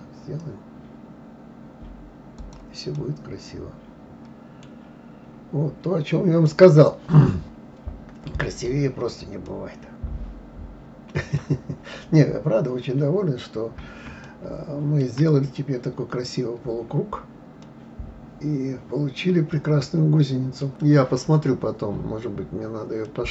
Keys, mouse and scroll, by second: 3.0-4.8 middle drag, 4.8-5.7 scroll down 4, 5.7-6.3 scroll up 5, 6.4-8.8 middle drag, 8.8-9.4 scroll down 2, 9.4-11.8 middle drag, 11.8-14.2 scroll up 2, 14.2-15.3 shift+middle drag, 15.3-17.6 scroll down 2, 17.6-20.6 middle drag, 21.9-22.3 scroll down 2, 22.3-23.1 scroll up 3, 23.1-23.3 middle drag.